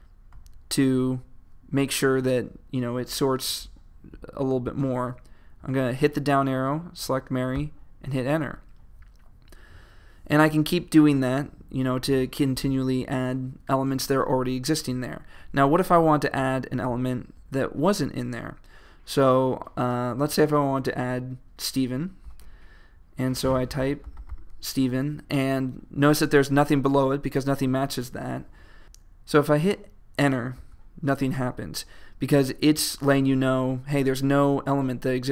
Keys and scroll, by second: 0.0 typing, 4.7 Down, 7.6 Return, 22.4 shift+s, 24.2 typing, 26.0-26.8 typing, 30.6 Return.